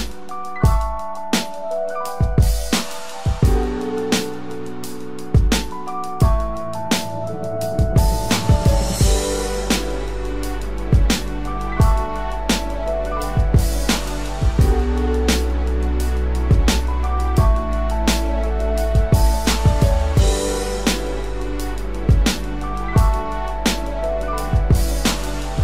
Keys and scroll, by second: 9.7 ctrl+-, 17.1 ctrl+=, 21.1 ctrl+t.